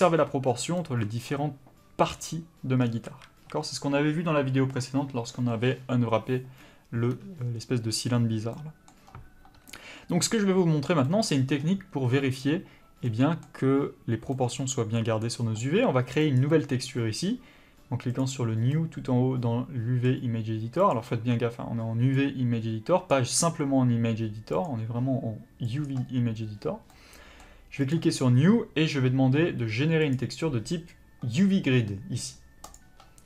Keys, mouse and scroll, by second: 0.8 middle click, 2.8 scroll down 1, 3.0 a, 8.5 middle click, 13.0 scroll up 1, 13.0 middle click.